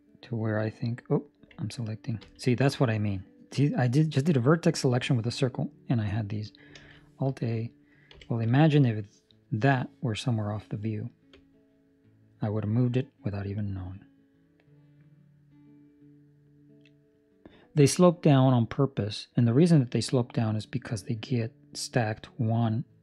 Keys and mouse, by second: 6.7 alt+a, 8.0 c, 11.3 click.